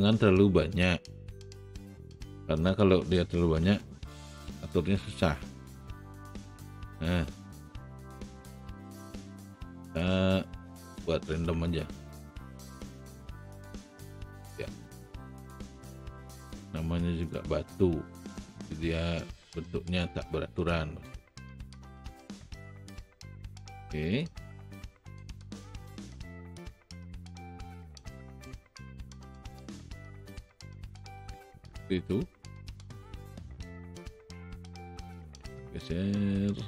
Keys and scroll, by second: 3.7 w.